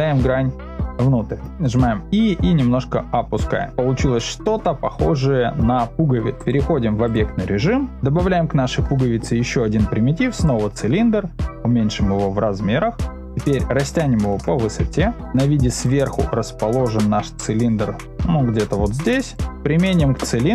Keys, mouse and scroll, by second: 0.9 click, 1.7 e, 3.7-4.8 middle drag, 5.2 shift+middle click, 6.3-7.1 drag, 8.6 shift+a, 11.5 s, 13.3-14.5 middle drag, 14.5 s, 14.5 z, 18.1 g, 19.3 drag, 19.5-20.0 middle drag.